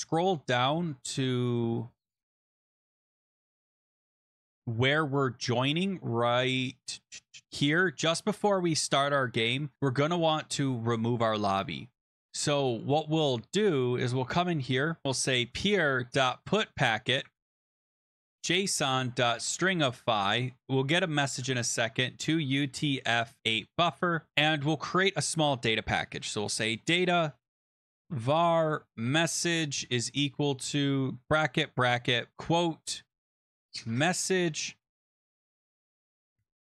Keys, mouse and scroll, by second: 0.9 scroll, 2.5-3.4 scroll, 4.0 scroll, 4.8-7.4 scroll, 7.6 click, 8.6 click, 8.9 click, 9.7-11.5 scroll, 11.5 scroll, 14.2 Return, 14.8-19.8 typing, 15.0 scroll, 15.1 click, 17.2 Tab, 20.7 Right, 21.0-24.2 typing, 25.6-36.6 typing.